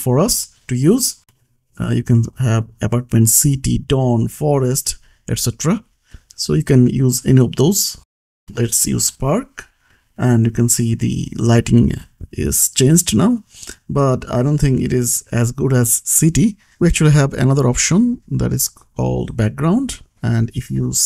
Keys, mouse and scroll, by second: 1.4-3.4 scroll down 1, 4.7 click, 8.3 click, 9.3 ctrl+c, 9.9 click, 10.4 ctrl+v, 11.4 click, 16.9 click, 19.5 click, 19.9-21.0 typing.